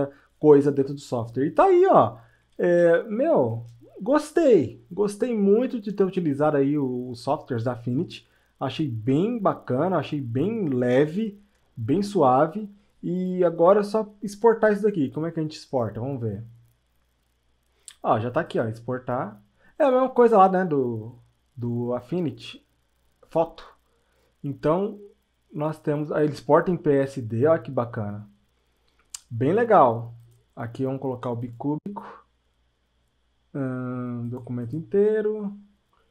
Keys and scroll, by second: 2.8 space.